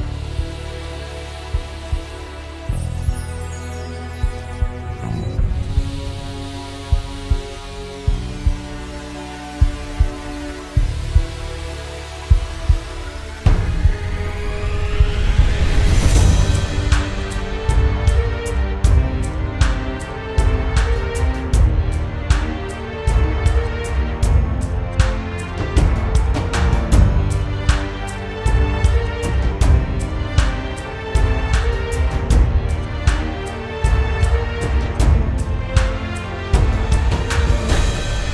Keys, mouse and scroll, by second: 12.0 ctrl+g, 21.4 ctrl+z, 24.5 ctrl+z, 26.3 ctrl+g.